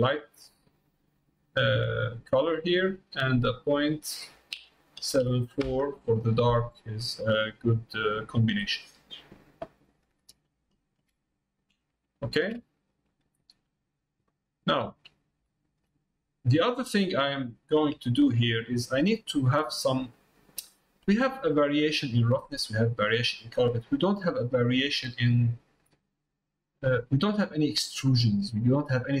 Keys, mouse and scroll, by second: 2.5 click, 3.8-6.6 drag, 7.3 middle click, 9.1 middle click, 9.8 middle click, 10.8 shift+middle click, 11.1 middle click, 12.1 shift+middle click, 13.0 middle click, 13.9 middle click, 15.1 middle click, 15.5 shift+middle click, 16.0 middle click, 16.7 middle click, 17.1 middle click, 18.1 shift+middle click, 18.5 middle click, 20.1 middle click, 20.7 shift+middle click, 21.2 middle click, 22.2 middle click, 23.5 middle click, 25.6 middle click.